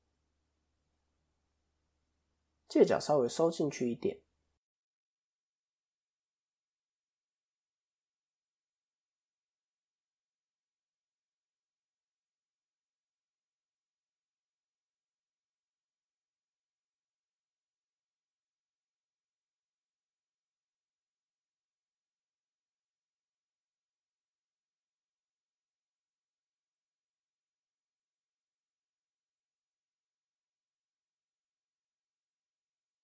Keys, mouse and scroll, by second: 0.0 KP_7, 4.4 ctrl+End, 4.9 click, 6.4 Tab, 7.0-7.8 scroll down 1, 7.8 click, 7.8 scroll down 1, 9.8 shift+middle click, 12.2 click, 17.9 ctrl+z, 19.1 o, 20.1 click, 29.6 ctrl+KP_3, 31.4 click, 31.9 scroll up 1, 32.6 scroll up 5, 32.8 middle click.